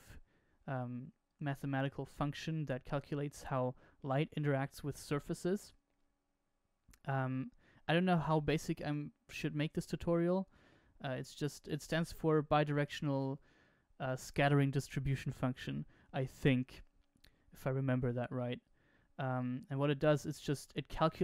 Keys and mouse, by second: 1.4-3.0 drag, 17.2 click, 18.6 click.